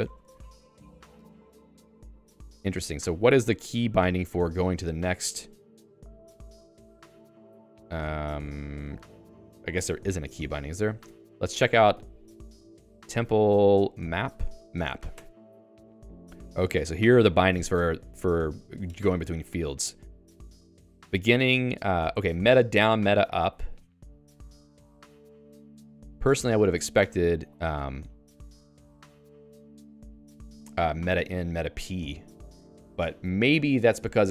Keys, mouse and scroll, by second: 0.0-1.1 typing, 11.0 Escape, 12.9-14.6 typing, 15.2 Return, 27.5 alt+Down.